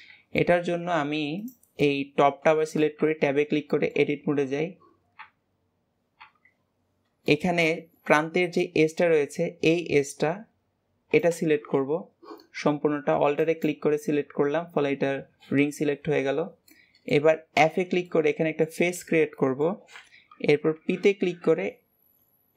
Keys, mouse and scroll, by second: 0.3-1.3 middle drag, 1.3 click, 1.7-2.9 middle drag, 2.9 Tab, 3.6-5.1 shift+middle drag, 5.1 Tab, 6.1 Tab, 6.6-7.3 scroll up 2, 7.3 shift+middle click, 7.6-11.2 scroll up 2, 13.3 alt+click, 14.7 Tab, 15.5 Tab, 15.9-16.7 scroll down 2, 16.7 middle click, 17.5 f, 18.0-20.7 middle drag, 20.7 p.